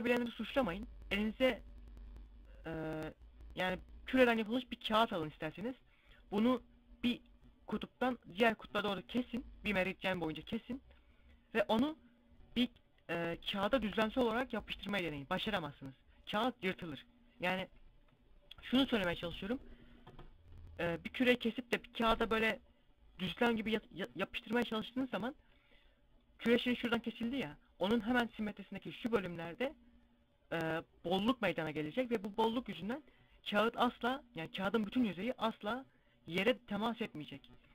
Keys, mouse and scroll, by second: 25.4 middle click.